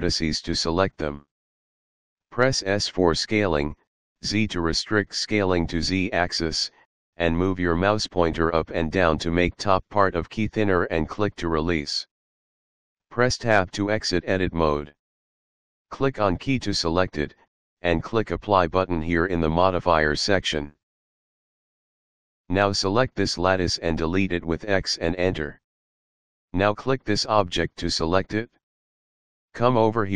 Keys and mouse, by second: 0.5 shift+click, 3.3 s, 3.7 z, 12.0 click, 13.6 Tab, 16.1 middle click, 18.1 middle click, 19.9 click, 21.7 click, 23.3 click, 24.9 x, 25.6 Return, 27.7 middle click, 30.0 shift+middle click.